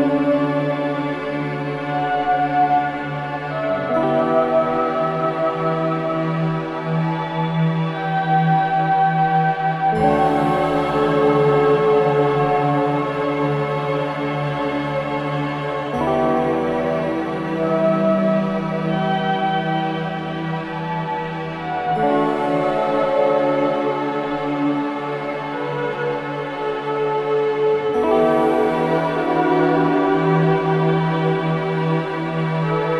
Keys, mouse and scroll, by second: 1.2 3, 3.5 scroll down 1, 3.7 click, 4.5 alt+right click, 4.8 alt+click, 5.3 alt+middle click, 5.9 alt+click, 6.8 alt+right click, 7.7 alt+middle click, 8.6 click, 11.0 1, 13.1 alt+click, 14.8-15.8 right drag, 15.8 click, 16.6 alt+click, 18.6 shift+click, 21.4 space, 21.5 click, 21.8 space, 22.6 scroll up 1, 22.8 alt+middle click, 23.3-23.8 scroll up 1, 24.0 alt+middle click, 24.5 scroll up 1, 26.4 F7, 28.3 4, 29.4 middle click, 29.8 4, 30.6 click, 32.0-32.9 ctrl+drag.